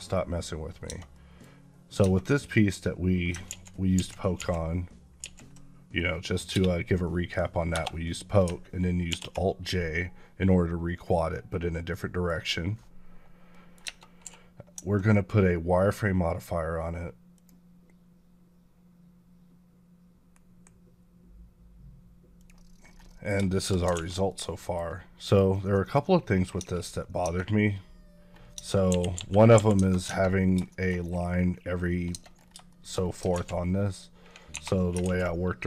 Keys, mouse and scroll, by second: 0.7 Tab, 1.3 middle click, 1.8 Tab, 3.3 ctrl+z, 5.0 ctrl+z, 5.8 middle click, 6.4 space, 7.6 Return, 8.9 alt+j, 11.8 middle click, 12.8-13.3 scroll up 1, 13.3 middle click, 13.7 Tab, 14.2 q, 17.2 click, 20.2 q, 22.2 click, 22.9 middle click, 23.4 shift+middle click, 23.8 alt+a, 24.1 middle click, 25.1 click, 25.6 middle click, 25.9 scroll up 1, 26.4 Tab, 27.2 scroll down 1, 28.4 Tab, 28.8 KP_1, 29.0 KP_5, 29.4 KP_5, 30.3 scroll down 1, 30.5 shift+middle click, 30.9 scroll down 1, 31.7 scroll down 2, 32.0 Tab, 32.2 scroll up 3, 32.5 shift+middle click, 33.2 alt+z, 33.5 scroll up 2, 34.4 2.